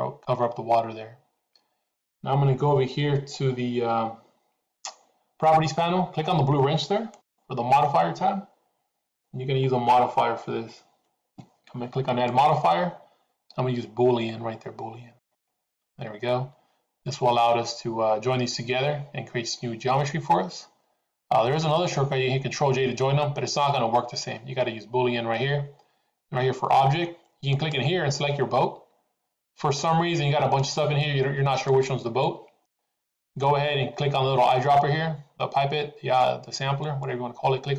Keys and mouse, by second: 7.1 click, 12.2-15.7 drag, 27.6-32.3 drag, 33.1-33.5 drag, 36.7 click.